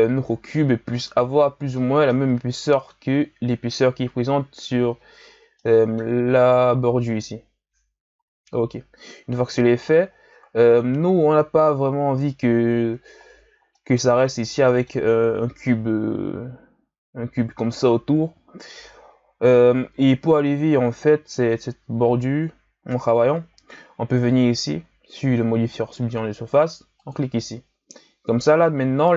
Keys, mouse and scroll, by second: 0.2-1.7 scroll up 4, 1.7-4.8 middle drag, 5.5-8.1 middle drag, 8.1 KP_1, 10.3-12.5 scroll up 4, 12.5-13.1 scroll down 3, 13.2-13.7 ctrl+scroll down 3, 13.7-16.7 middle drag, 19.3 KP_1, 20.5-24.0 scroll up 3, 27.0 click.